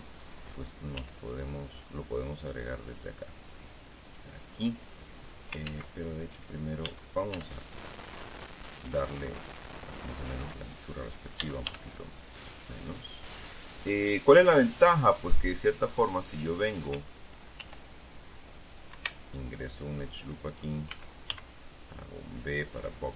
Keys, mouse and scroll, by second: 1.5 r, 6.2 ctrl+z, 7.4 s, 10.5 click, 12.0 s, 12.2 y, 13.2 click, 14.1-17.2 middle drag, 18.1 ctrl+r, 19.3 click, 19.5 Escape, 19.9-21.4 middle drag, 21.5 a, 22.5-23.1 drag.